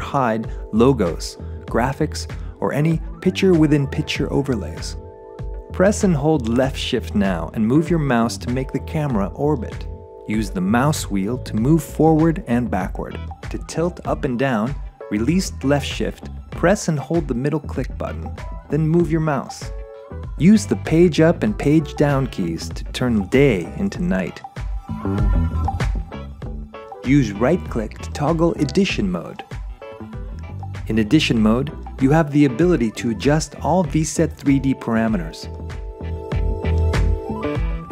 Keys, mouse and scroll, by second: 1.3 p, 2.9 p, 4.5 p, 6.0 p, 13.8 scroll, 16.8 Page_Up, 17.8 Page_Up, 19.0 Page_Up, 20.8 Page_Down, 21.8 Page_Down, 27.6 right click, 34.9 right click, 35.6 shift+right click, 36.4 click, 37.1 click.